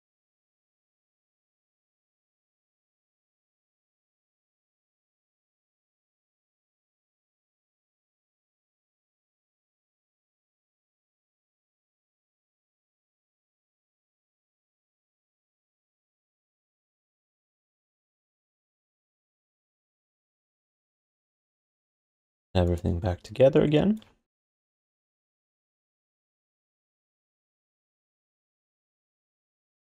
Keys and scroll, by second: 2.6 1, 12.7 q, 13.7 alt+shift+d, 13.9 alt+q, 17.1 alt+shift+d, 17.2 alt+q, 17.7 3, 18.4 1, 20.1-21.5 typing, 22.1 ctrl+shift+d, 24.4 alt+shift+d, 24.6 alt+q, 25.6 1, 28.7 q.